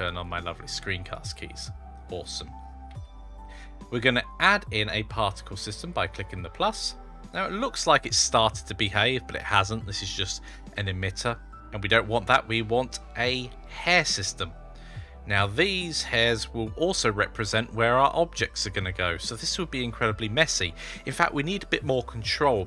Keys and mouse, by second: 0.0 click, 0.9 click, 1.9 click, 2.7 typing, 5.7 click, 5.7 typing, 13.8 click, 15.2-16.0 middle drag, 17.9-19.1 middle drag.